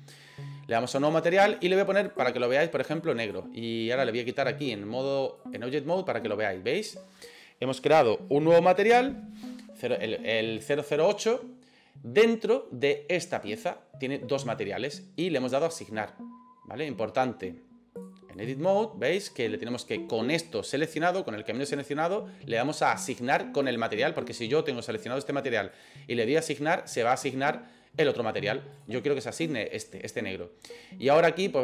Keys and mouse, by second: 1.1 click, 2.1 click, 4.7 click, 18.0 click, 23.7 click, 25.8 click, 28.8 click, 29.5 click, 31.1 click.